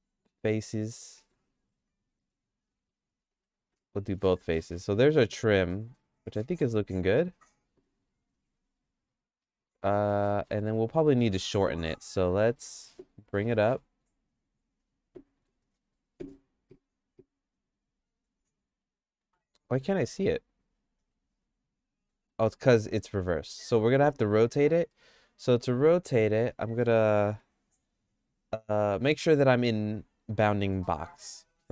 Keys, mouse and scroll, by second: 1.2 middle click, 1.5 shift+middle click, 2.7 shift+middle click, 3.3 click, 3.6 x, 4.1 middle click, 4.5-6.7 shift+middle drag, 8.0 g, 9.5 middle click, 9.8 middle click, 12.3 Tab, 13.3 g, 15.4 g, 18.7 Tab, 19.3 Tab, 19.6 middle click, 20.1-22.3 shift+middle drag, 23.0 shift+middle click, 23.7 Tab, 24.4 Tab, 24.6 middle click, 24.9 shift+middle click, 26.2 shift+c, 27.3 KP_Decimal, 29.4 ..